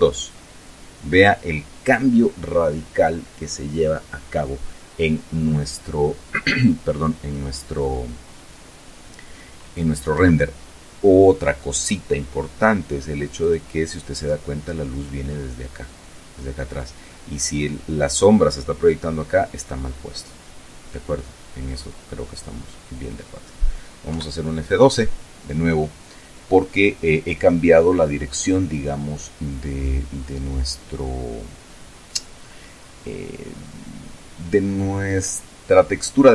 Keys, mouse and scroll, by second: 0.0 click, 9.9 Escape, 13.1 click, 19.9-22.9 drag, 23.8 F12.